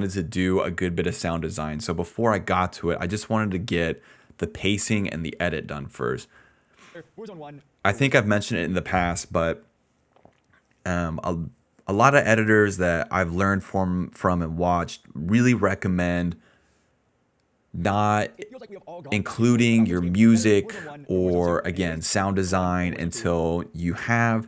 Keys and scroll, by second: 6.8 space, 7.5 space, 7.7 space, 8.0 space, 17.8-19.6 typing, 21.7 s, 21.9 space, 22.3 space, 23.3 space.